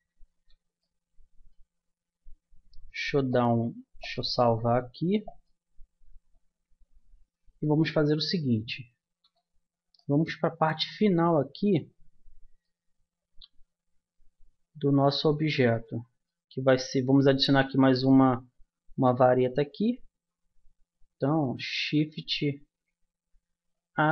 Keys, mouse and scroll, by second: 0.1 Tab, 1.3-5.3 middle drag, 1.8 a, 8.3-14.5 middle drag, 16.2-21.6 middle drag, 21.6 shift+a.